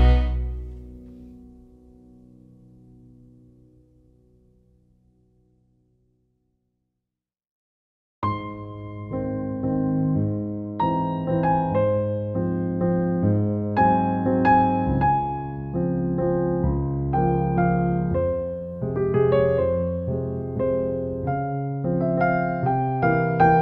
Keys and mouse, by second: 0.8 f, 0.8 g, 1.6 alt+middle click, 2.5 Tab, 2.6 click, 2.7 alt+middle click, 3.3 click, 3.5 shift+middle click, 3.7 alt+middle click, 3.9 KP_1, 4.5 click, 5.1 click, 6.6 middle click, 6.8 alt+middle click, 7.0 shift+middle click, 7.3 g, 7.8 KP_1, 8.3 click, 8.4-9.6 alt+middle drag, 9.8 KP_1, 10.2 click, 11.4 Tab, 11.5 Tab, 11.6 click, 11.8 alt+middle click, 12.4 alt+middle click, 12.8 alt+middle click, 13.5 middle click, 14.3 click, 14.4 ctrl+s, 14.8 alt+middle click, 16.3 alt+middle click, 16.6 click, 16.8 middle click, 17.6 click, 18.2 alt+middle click, 19.7 alt+middle click, 20.8 click, 21.2 click, 21.7 click, 22.1 click, 22.7 alt+middle click, 22.9 click, 23.0 Tab, 23.4 click.